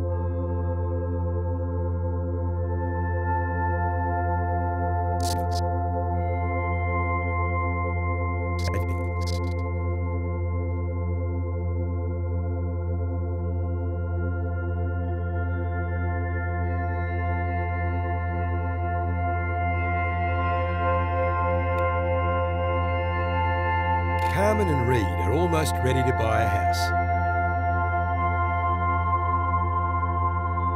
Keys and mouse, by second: 0.9-2.5 drag, 3.3 click, 4.4 drag, 5.1-6.0 drag, 6.5-8.6 drag, 10.1 click, 12.3-13.4 drag, 13.6 Left, 15.8-17.1 drag, 17.1-17.6 typing, 17.9 Return, 19.9 click, 21.2-21.6 drag, 21.8 click, 22.0 typing, 24.1 space, 26.9 space, 28.2 click.